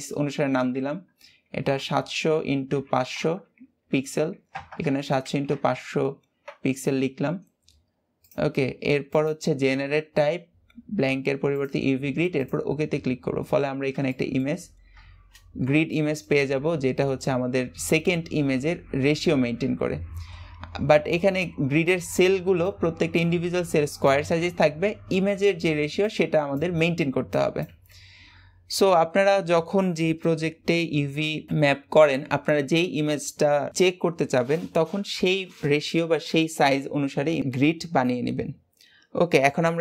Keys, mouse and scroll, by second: 1.8 KP_0, 3.0 KP_0, 13.0-14.0 scroll up 3, 14.0 shift+middle click, 14.6-15.8 scroll down 2, 15.8-18.8 shift+middle drag, 20.2-20.6 scroll up 2, 24.6-28.0 scroll down 7.